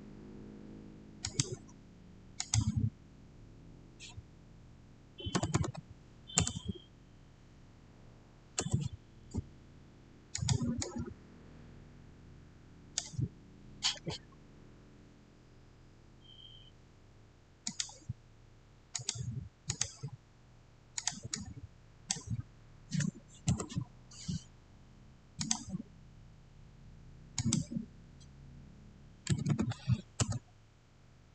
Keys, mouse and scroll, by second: 1.1 middle click, 1.1 click, 5.1-5.9 typing, 5.3 click, 6.2 Return, 8.4 Return, 10.2-15.1 drag, 17.5-23.4 drag, 23.4 Return, 25.3 click, 27.3 click, 28.9-29.9 typing, 30.1 Return.